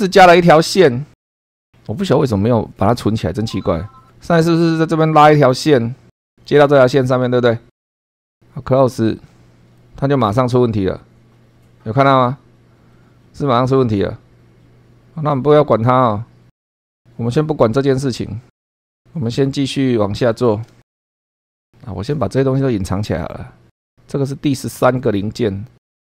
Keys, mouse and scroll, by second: 0.3 click, 3.0-3.3 scroll up 1, 5.3 click, 6.6 click, 8.2 click, 9.7 middle click, 18.5 click, 20.9 shift+middle click, 21.6 click, 22.3 scroll down 2, 23.1 click, 25.0 click, 25.4 space.